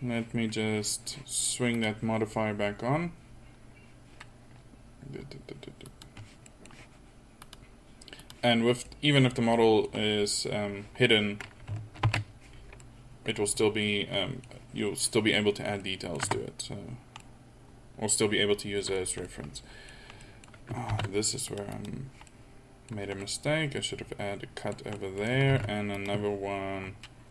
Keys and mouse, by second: 12.3 alt+h, 16.4 Tab, 21.0 ctrl+r, 25.6 ctrl+r.